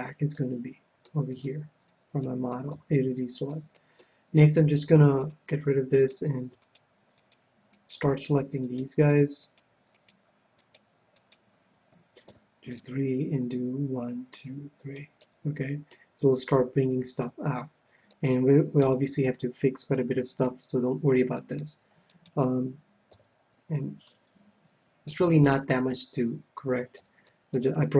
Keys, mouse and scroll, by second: 2.8 a, 5.1-6.9 drag, 6.0-12.8 right drag, 12.3 KP_3, 12.8-13.9 middle drag, 13.9-15.3 drag, 15.3-16.8 middle drag, 18.1-23.1 middle drag, 22.1-23.9 right drag, 23.1 KP_3, 24.0-25.7 drag, 25.3-26.9 middle drag, 27.1 a, 27.3-27.9 middle drag.